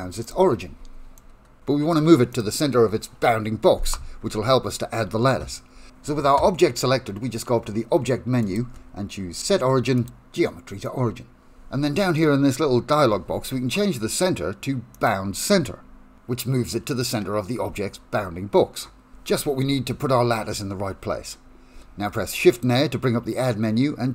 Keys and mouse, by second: 0.3 click, 1.3 middle click, 2.4 click, 4.3 Tab, 8.6-10.4 drag, 12.2 shift+middle click, 15.0-17.3 drag, 17.8-21.7 middle drag, 21.8 shift+a.